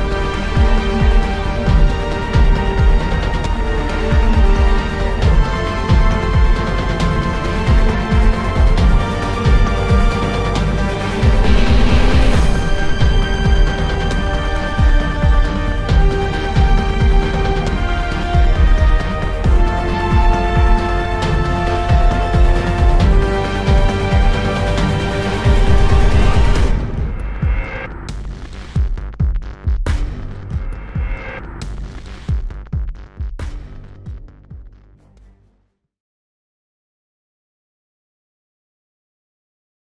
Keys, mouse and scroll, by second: 0.1 middle click, 0.5 middle click, 1.0 click, 1.1 click, 1.2 click.